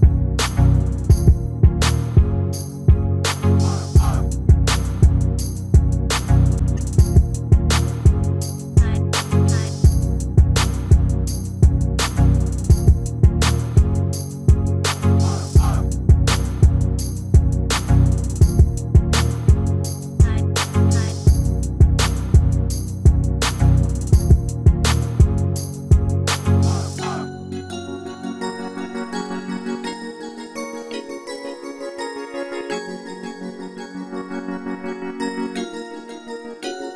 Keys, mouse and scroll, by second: 2.5-5.3 middle drag, 3.8 s, 7.7-9.5 middle drag, 10.1 ctrl+KP_1, 12.1-15.6 middle drag, 15.6-17.4 drag, 17.7 s, 19.6-21.4 middle drag, 21.1 KP_1, 23.5-25.2 drag, 24.9 s, 25.4 click, 28.9 middle click, 31.8-35.9 middle drag, 35.9 scroll down 1, 36.2-36.9 middle drag.